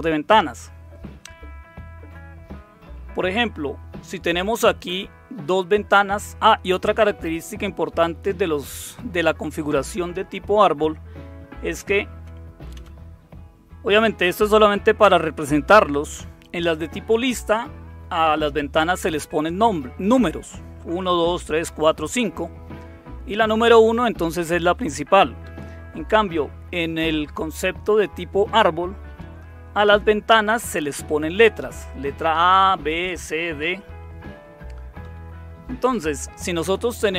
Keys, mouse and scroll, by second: 1.9 Right, 11.7 Left, 12.1 Left, 12.7 Left, 25.4 Right, 29.2 Tab, 35.0 Tab.